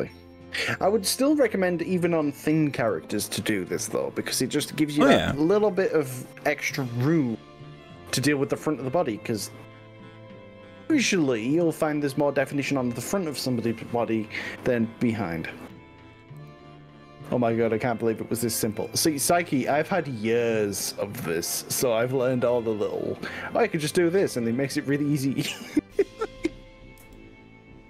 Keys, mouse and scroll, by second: 1.3 scroll up 1, 2.8 g, 3.4 click, 5.8 g, 6.1 o, 7.0 scroll up 2, 7.4-8.4 scroll down 7, 9.4-9.8 scroll up 2, 15.6 click, 16.4 click, 18.0 click, 18.8 g, 20.2-20.6 scroll down 3, 20.6-21.2 scroll up 4, 22.6 click, 22.8-24.6 middle drag, 25.6 click, 27.0 s.